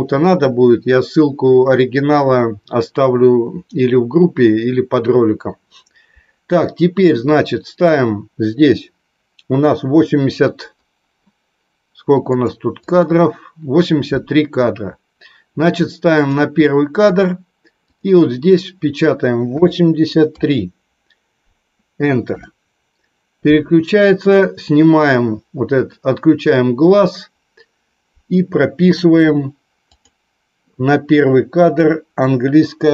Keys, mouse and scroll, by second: 13.0 click, 16.3 click, 17.9-23.5 drag, 25.8-30.4 drag.